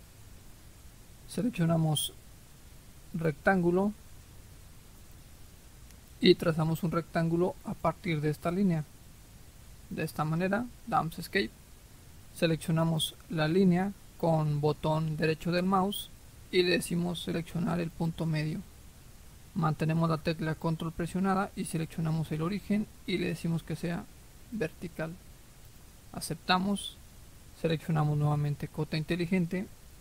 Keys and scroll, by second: 10.7 Escape.